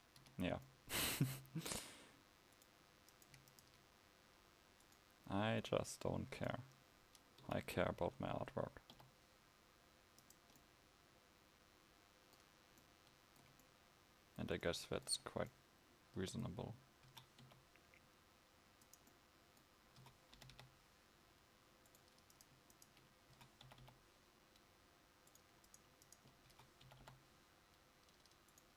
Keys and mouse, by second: 0.3 Tab, 10.7 s, 19.2 s, 20.0 s.